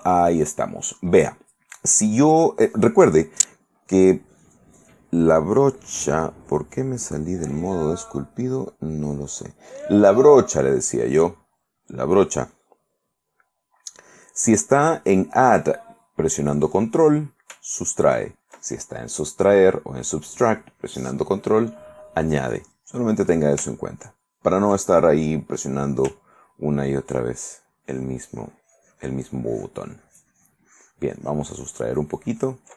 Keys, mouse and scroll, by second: 2.9 right click, 4.2 right click, 6.3 click, 7.7 click, 9.0 right click, 27.2 ctrl+click, 27.7-32.7 ctrl+drag.